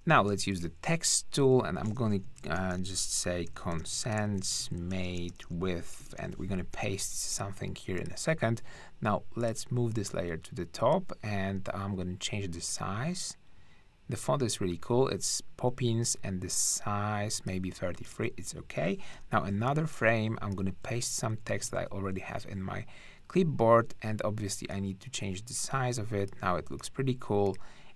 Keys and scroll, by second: 0.5 t, 2.4-6.7 typing, 19.1 t, 20.8 super+v, 21.7 super+a.